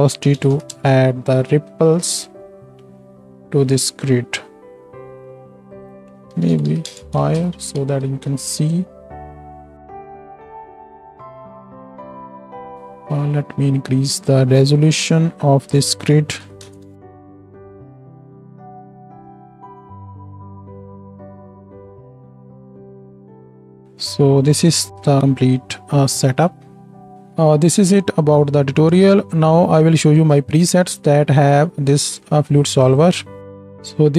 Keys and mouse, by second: 7.3 shift+click, 7.3 shift+middle click, 7.3 shift+right click, 7.4 shift+Left, 7.8 space, 12.4 space, 12.7-20.5 drag, 12.7-34.1 right drag, 17.2 shift+Left, 17.2-20.5 shift+middle drag, 17.4 space, 21.8 space, 21.9 shift+Left, 21.9-34.1 shift+middle drag, 22.0 space, 23.4 space, 27.1-34.1 drag, 33.4 shift+Left.